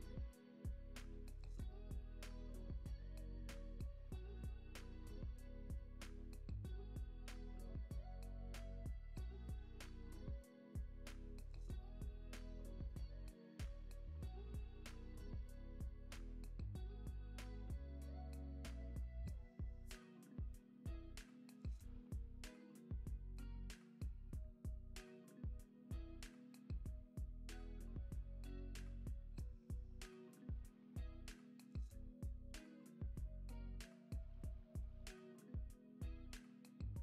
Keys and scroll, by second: 0.1 super+v, 2.4 alt+q, 4.2 space, 9.2 space, 9.8 z, 15.8 space, 21.6 space, 21.9 super+s, 22.4 x, 23.0 z, 25.9 super+s, 26.2 space, 28.4 space, 29.0 x, 33.5 x, 34.1 space, 35.7 space, 36.7 Up.